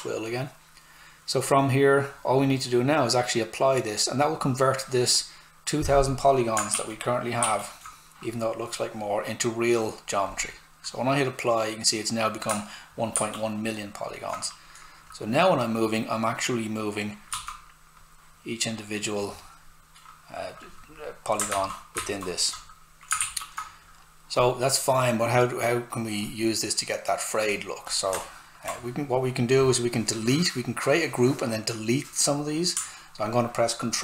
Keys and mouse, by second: 6.5 click, 6.7 shift+f, 10.2 click, 12.9 shift+click, 13.1 shift+f, 15.0 click, 17.3 s, 17.4 click, 21.5 ctrl+z, 23.2 shift+f, 24.3 click, 28.2 alt+right click, 32.7 ctrl+right click.